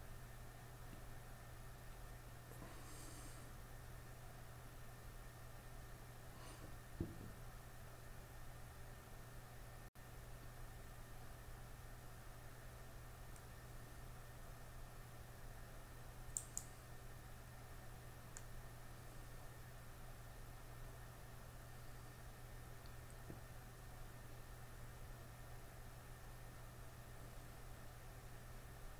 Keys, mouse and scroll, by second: 17.5 click.